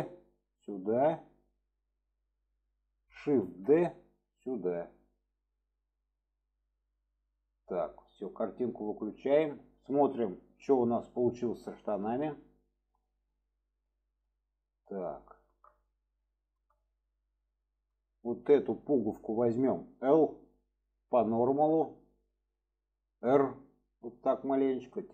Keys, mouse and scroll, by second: 3.4 shift+d, 8.8 click, 9.9-11.1 middle drag, 12.0 alt+z, 12.4-12.9 middle drag, 13.3-14.3 middle drag, 15.4 shift+middle drag, 16.3-16.6 shift+middle drag, 18.0 click, 21.4 click, 25.0 click.